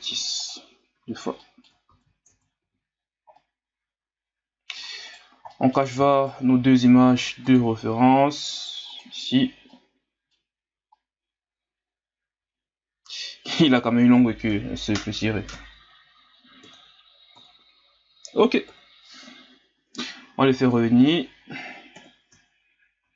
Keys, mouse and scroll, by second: 0.1 w, 1.0 a, 1.4 middle click, 1.9 ctrl+s, 2.3 Tab, 2.6 a, 3.0-3.3 scroll down 3, 3.3-5.1 middle drag, 5.1 right click, 5.5 middle click, 6.2 shift+right click, 7.4 click, 8.9 click, 9.7-13.9 middle drag, 14.5 KP_3, 15.5 KP_1, 16.6 KP_3, 17.3 KP_1, 18.7 KP_Divide, 20.6 click, 21.0 click, 21.9 KP_1, 23.0 ctrl+s.